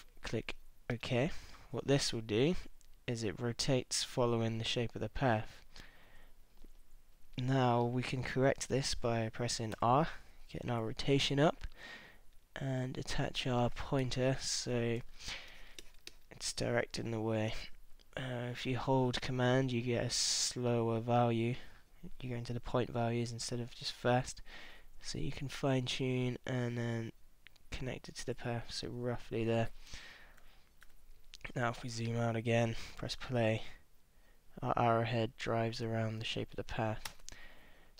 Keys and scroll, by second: 9.8 r, 14.1 super+=, 15.0 super+space, 30.0 super+-, 31.9 super+space, 37.1 space.